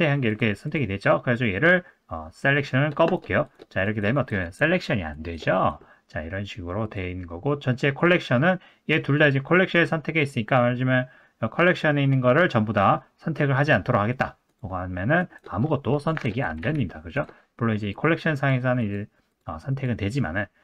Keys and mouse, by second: 0.3 click, 3.0 click, 3.8 click, 4.2 click, 4.5 click, 5.1 click, 5.6 click, 6.8 click, 14.5 click, 15.3 click, 16.5 click, 16.6 a, 17.1 click, 17.9 click, 18.3 click, 18.9 click, 19.4 click, 19.7 click.